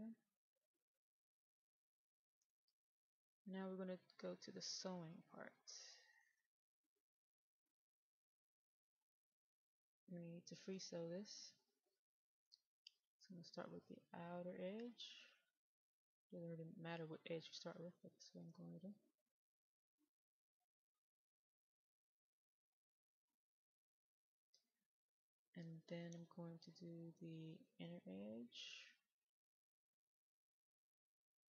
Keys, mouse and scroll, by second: 3.5-4.1 scroll down 1, 4.1 middle click, 5.2-6.1 scroll down 1, 6.1-12.3 drag, 12.3-12.7 scroll down 1, 12.7 middle click, 14.7 click, 17.9 middle click, 19.8 click, 25.2 middle click, 27.4 click.